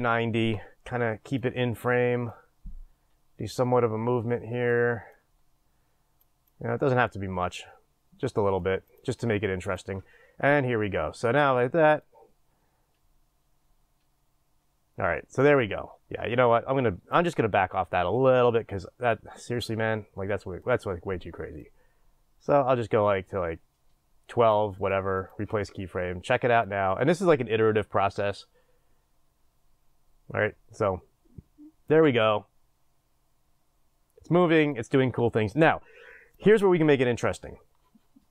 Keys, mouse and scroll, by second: 0.7-8.9 drag, 8.9-11.2 right drag, 11.2 click, 12.0 click, 21.7-25.3 drag, 25.3-26.7 right drag, 26.7 click, 27.2 click.